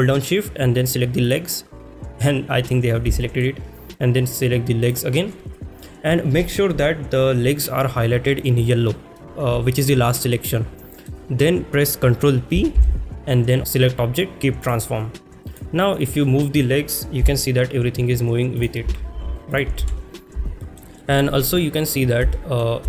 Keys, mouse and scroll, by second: 1.3 shift+click, 3.2 shift+middle click, 9.6 shift+middle drag, 10.1-11.1 middle drag, 14.7 ctrl+p, 15.5 click, 16.0 click, 19.5 ctrl+z, 19.5 click, 19.5 g, 19.9 ctrl+s, 20.6 shift+middle drag, 21.0 shift+middle click, 22.3 shift+middle drag.